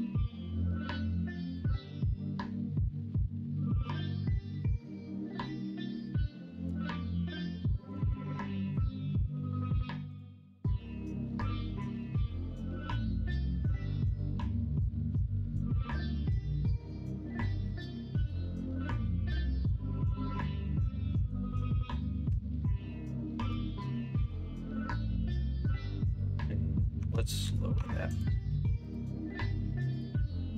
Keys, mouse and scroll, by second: 7.6 middle click, 7.9 alt+z, 8.2 middle click, 11.0-15.3 drag, 15.3 middle click, 16.1 middle click, 17.1 middle click, 17.6 middle click, 17.9 middle click, 19.4 middle click, 19.9 middle click, 20.7 alt+z, 21.0 middle click, 21.8 middle click, 22.2 Tab, 22.4 middle click, 22.9 middle click, 24.3 middle click, 27.7 Tab, 28.5 Tab.